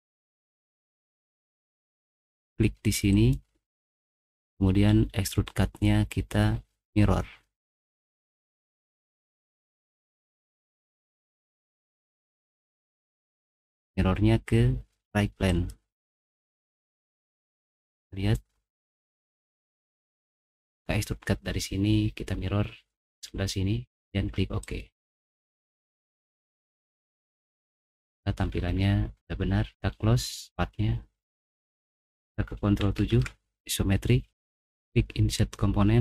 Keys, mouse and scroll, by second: 7.8 click, 9.4-10.7 middle drag, 11.2 middle click, 11.6 middle click, 12.6 click, 16.5 middle click, 17.1 middle click, 17.6 middle click, 18.0 middle click, 18.7 middle click, 19.3 middle click, 24.6 click, 27.4 middle click, 28.6 middle click, 33.1 ctrl+7, 34.7 click.